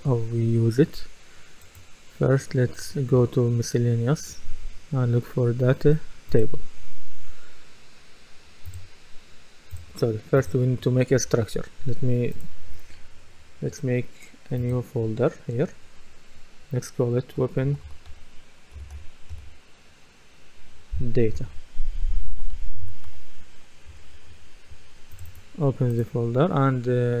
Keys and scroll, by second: 17.4-19.8 typing, 22.1-23.6 typing, 23.9 Return.